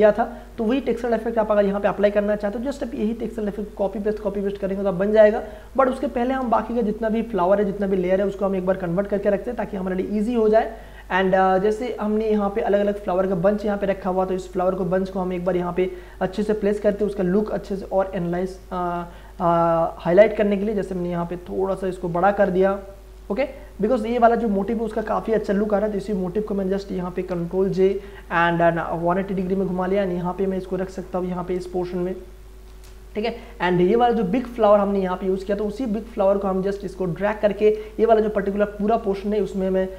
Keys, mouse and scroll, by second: 0.4 click, 3.3 click, 5.4 space, 5.8-12.0 ctrl+drag, 12.0 scroll up 1, 13.6 click, 15.5 ctrl+space, 15.9 ctrl+click, 16.1 ctrl+space, 16.5 click, 16.8 ctrl+space, 17.5-19.0 drag, 18.9 ctrl+t, 19.9 shift+click, 21.4 click, 22.5 click, 23.2 ctrl+space, 23.5 ctrl+click, 23.8 ctrl+space, 25.4 Return, 26.9 ctrl+j, 27.3 ctrl+t, 27.8 right click, 28.8-31.7 drag, 31.7 space, 31.8 click, 32.1 space, 32.4 ctrl+click, 33.2 Return, 34.3 click, 34.9 space, 35.0-37.7 ctrl+drag, 37.7 ctrl+t, 38.1 ctrl+right click.